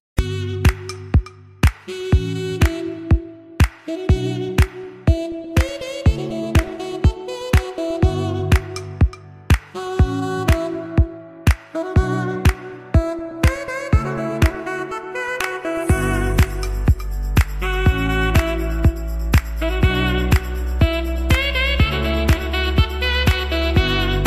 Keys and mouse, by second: 0.4-1.8 middle drag, 5.4 z, 10.0 click, 11.4-13.1 drag, 17.0-24.2 drag.